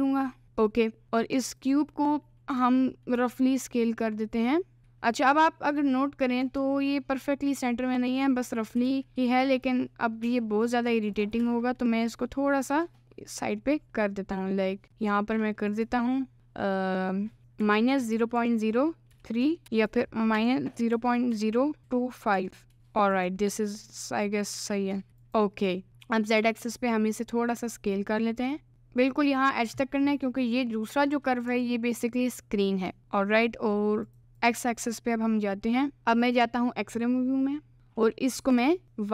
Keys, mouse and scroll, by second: 0.6 middle click, 2.6 s, 4.8 g, 8.8 s, 11.1 click, 11.5 g, 26.4 s, 29.3 alt+middle click, 31.5 s, 33.0 s, 34.1 click, 34.5 click, 36.0 KP_Decimal, 36.3 click, 37.1 n, 37.7 KP_Decimal, 38.5 s.